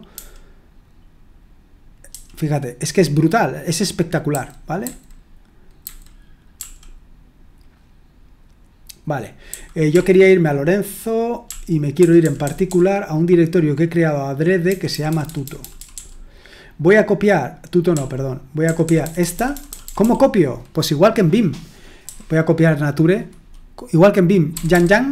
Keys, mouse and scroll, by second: 2.1 j, 4.3-6.5 typing, 9.5-9.9 typing, 11.2-13.2 typing, 14.7-15.7 typing, 17.9-19.8 typing, 22.0 typing, 24.5 typing.